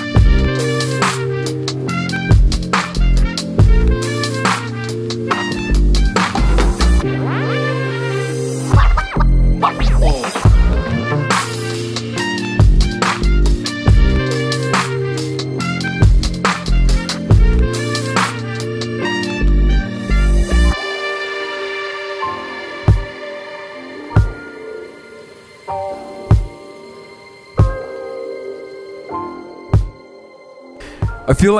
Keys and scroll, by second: 0.0-0.3 typing, 0.5 super+0, 0.9 super+=, 1.3 typing, 2.1 Left, 2.2 Right, 12.8 super+z, 13.1 v, 15.1 super+0, 15.2 super+=, 16.9 super+z, 17.1 BackSpace, 17.6 super+c, 17.8 super+v, 18.7 super+=, 18.8 e, 19.3 v, 19.6 super+0, 21.3-22.0 typing, 22.8 super+-, 22.9 super+-, 22.9 super+1, 22.9 super+=, 24.8 super+0, 24.9 super+=, 25.0 super+=, 25.8 super+0, 25.9 super+=, 25.9 super+=, 26.5 super+z, 26.9 super+0, 27.2 super+=, 27.2 super+=.